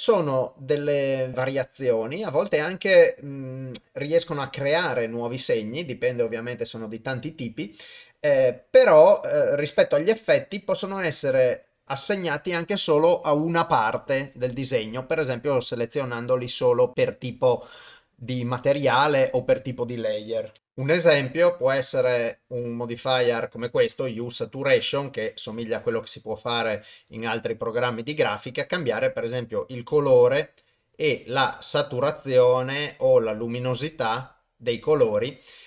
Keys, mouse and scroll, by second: 1.3-20.6 drag, 20.6 ctrl+alt+shift+g, 20.9-25.2 drag, 27.2-30.3 drag, 31.3-33.0 drag, 33.7-35.6 drag.